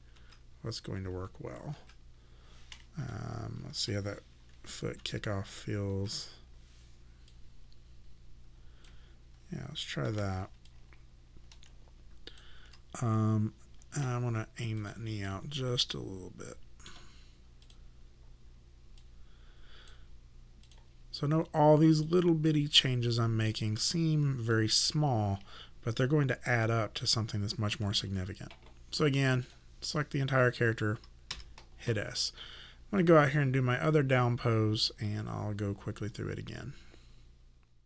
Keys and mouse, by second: 0.0-1.7 typing, 3.2 alt+click, 4.5 ,, 5.0 ., 5.4 ,, 5.9 ., 7.3 click, 10.0 w, 10.7 alt+click, 14.8 click, 15.3 middle click, 17.7 click, 22.5 middle click, 24.5 alt+click, 29.4 click, 31.3 s, 33.0 click.